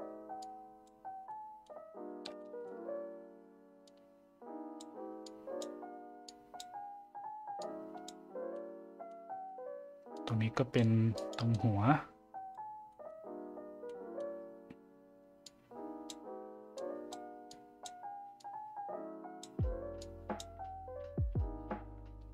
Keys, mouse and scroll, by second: 0.4 click, 1.3-1.6 middle drag, 2.4 shift+middle drag, 3.9 click, 5.3 click, 6.3 click, 7.6 click, 8.5-9.1 middle drag, 10.2 click, 11.1 click, 11.6 click, 12.9 middle drag, 13.8-14.2 middle drag, 15.5 click, 16.8 click, 17.5 click, 18.4-19.4 drag, 20.0 click.